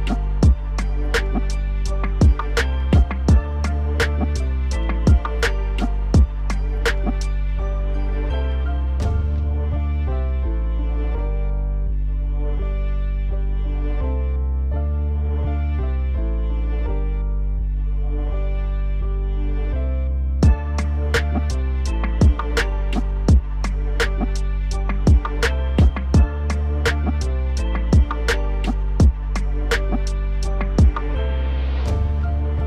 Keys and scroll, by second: 10.4 ctrl+s.